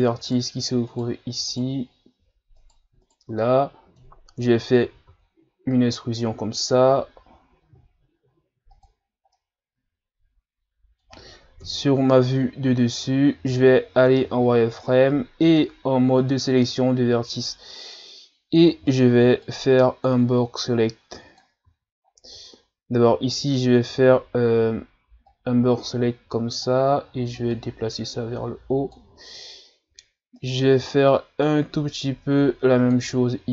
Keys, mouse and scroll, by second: 0.3 shift+right click, 0.9 shift+right click, 1.5 shift+right click, 2.6 shift+right click, 3.0 shift+right click, 3.4-5.1 middle drag, 5.1 e, 9.1-9.4 scroll down 1, 9.4-11.6 middle drag, 11.6 KP_7, 12.5-12.8 scroll down 1, 12.8-14.2 scroll up 2, 14.3 z, 14.8-15.4 scroll up 2, 15.4 ctrl+Tab, 18.0 scroll up 1, 18.9 right click, 19.1 b, 20.7 click, 21.7 ctrl+z, 22.2 scroll down 1, 22.5-23.5 shift+scroll up 2, 24.6 b, 27.5 click, 30.4 right click, 30.8 b.